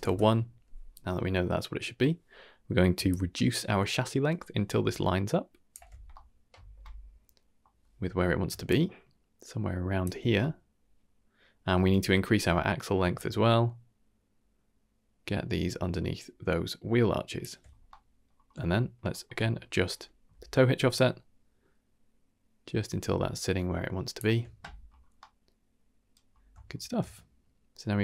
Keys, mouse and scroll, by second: 1.5-2.0 middle drag, 3.0-5.8 shift+drag, 6.1-6.8 middle drag, 6.9 middle click, 8.6-10.1 shift+drag, 10.4-11.9 middle drag, 12.1-13.0 scroll up 2, 13.1-17.4 shift+drag, 17.8-18.2 middle drag, 18.3-18.9 scroll down 2, 18.6-18.9 shift+middle drag, 19.1 shift+middle drag, 19.4-19.7 middle drag, 20.9-24.2 shift+drag, 24.8-25.2 scroll down 2, 25.2-26.1 middle drag, 26.2-26.7 scroll down 3, 26.7 shift+middle drag, 27.0-27.8 middle drag, 27.9 scroll down 1.